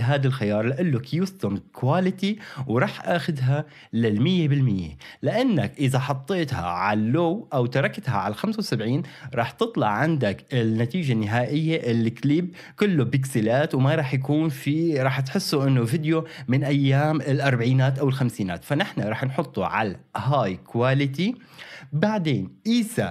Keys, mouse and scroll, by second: 3.8-21.6 drag.